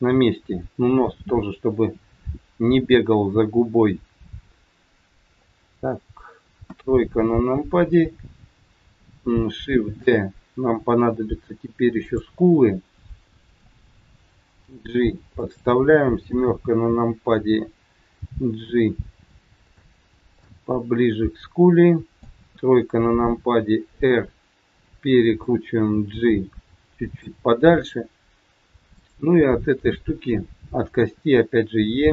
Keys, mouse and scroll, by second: 1.6 middle click, 3.9 middle click, 6.6 KP_1, 7.2-7.6 scroll down 3, 9.8 shift+d, 12.3 middle click, 14.6 g, 16.4 KP_7, 18.1 g, 20.3 middle click, 22.5 KP_3, 23.9 r, 26.1 g, 27.6-28.0 scroll up 4, 28.8 click, 31.0 e.